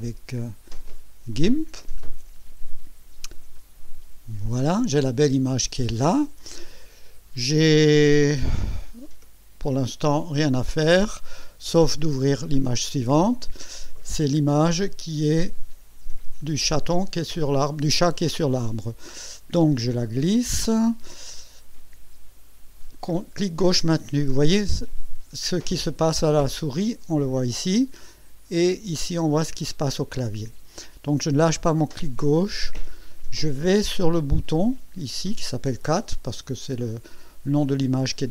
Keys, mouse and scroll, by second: 1.3 click, 12.4 click, 18.6-38.3 drag.